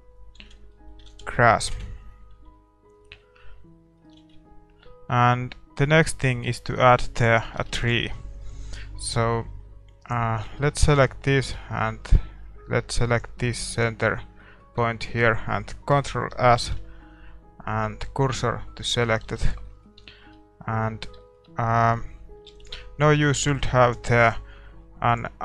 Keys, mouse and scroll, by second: 0.5 shift+z, 0.7-5.8 middle drag, 1.7 ctrl+s, 1.7 KP_0, 4.3 shift+z, 7.1-8.9 drag, 7.5 shift+z, 8.1 ctrl+s, 8.1-11.6 middle drag, 10.1 right click, 10.5 Tab, 10.8 click, 11.0 click, 11.7 middle click, 12.0-13.1 middle drag, 18.9 shift+s, 19.3 Tab, 19.4-25.3 middle drag, 25.3 ctrl+s, 25.3-25.4 drag.